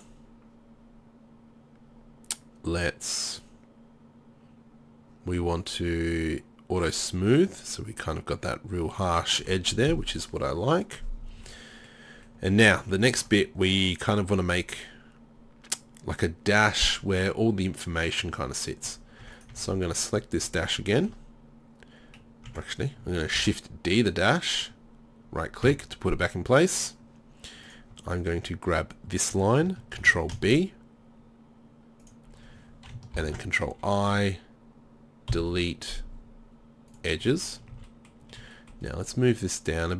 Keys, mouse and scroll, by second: 9.0 middle click, 11.6 middle click, 12.9 middle click, 18.9 Tab, 19.3 Tab, 19.5 Tab, 22.5 Tab, 23.4 shift+d, 25.7 Tab, 30.0 ctrl+b, 33.2 ctrl+i, 35.3 Delete, 37.8 a.